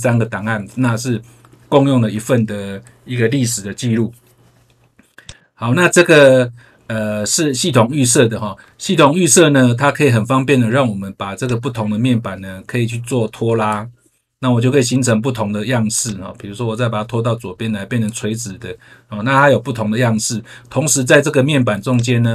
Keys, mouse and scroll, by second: 5.2 click, 11.4 click, 16.0 click, 21.9 click.